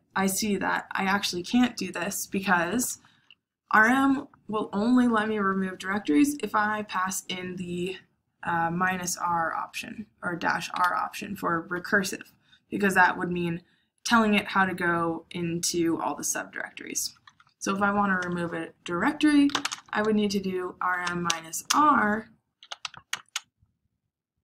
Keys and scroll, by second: 18.1-23.0 typing.